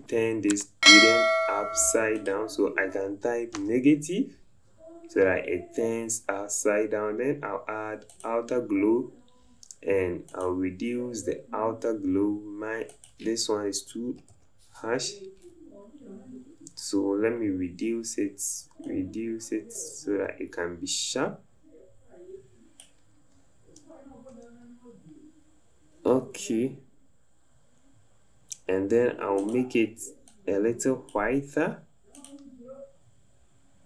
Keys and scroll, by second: 14.2 KP_1, 14.4 KP_2, 24.4 Up, 24.6 Up.